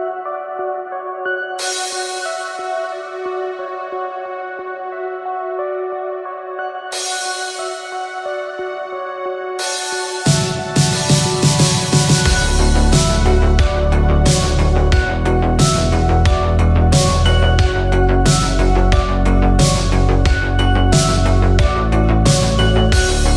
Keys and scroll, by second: 0.0 b, 1.1-2.5 typing, 18.3 shift+Right, 18.9 shift+Down, 19.2 shift+Right, 19.7 Up.